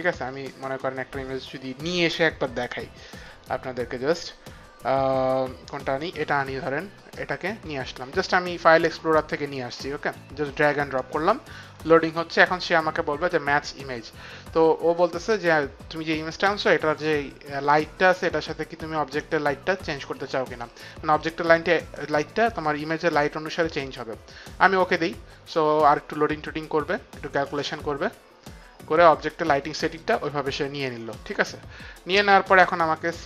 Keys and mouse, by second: 0.1 click, 3.1 click, 4.2 click, 5.7 click, 7.3 click, 8.8 click, 24.8 click, 32.8 click.